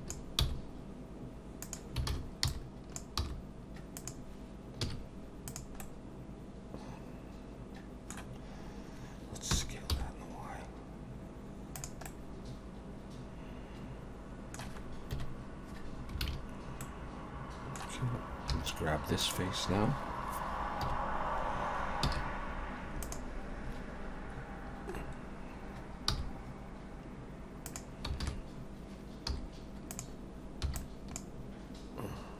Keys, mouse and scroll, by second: 0.4 g, 2.1 alt+a, 2.4 b, 3.2 g, 4.8 z, 5.8 middle click, 9.5 s, 12.0 middle click, 15.1 KP_1, 16.2 alt+a, 16.8 middle click, 18.5 3, 19.2 click, 20.8 KP_1, 22.0 e, 25.0 scroll down 1, 26.1 g, 28.2 alt+a, 29.3 z, 30.6 b.